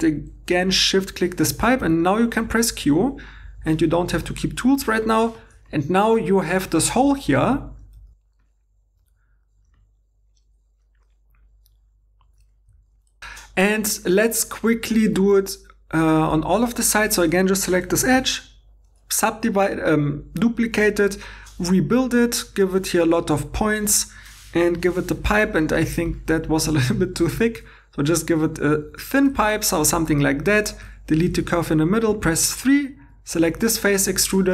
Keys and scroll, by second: 1.8 g, 9.2-10.9 typing, 11.2 alt+Tab, 11.5 alt+Tab, 12.4 super+z, 12.4 super+z, 12.7 shift+e, 13.1 alt+i, 16.6 2, 18.1 shift+d, 24.8 p, 30.6-32.1 typing.